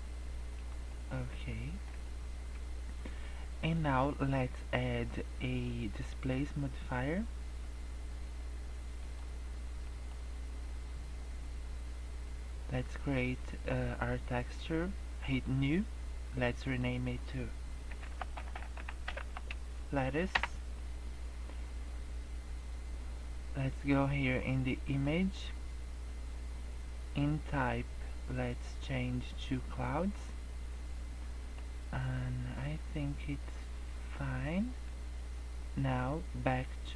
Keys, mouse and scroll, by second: 0.9 middle click, 1.5 shift+middle click, 2.0 middle click, 3.5 middle click, 6.3 click, 9.8 middle click, 15.3 click, 16.6 click, 18.5 t, 24.8 click, 28.8 click, 30.7 middle click, 31.9 middle click, 33.3 middle click.